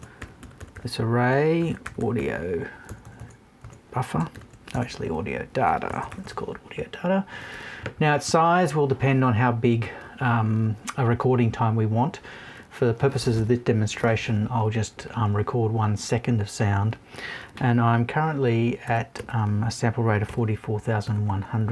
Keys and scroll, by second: 2.8 BackSpace, 4.2 shift+BackSpace, 5.5 BackSpace.